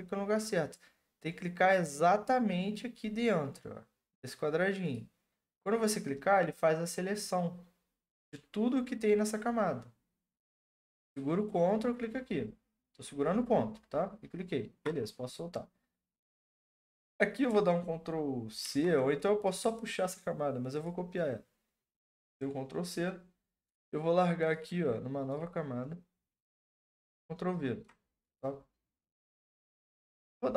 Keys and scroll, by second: 18.6 ctrl+c, 26.8 ctrl+v, 30.1 ctrl+t.